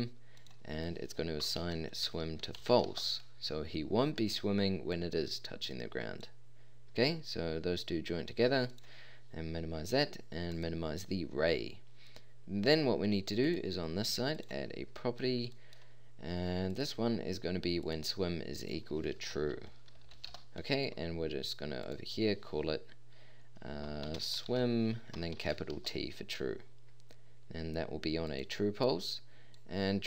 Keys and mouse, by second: 12.0-12.8 drag.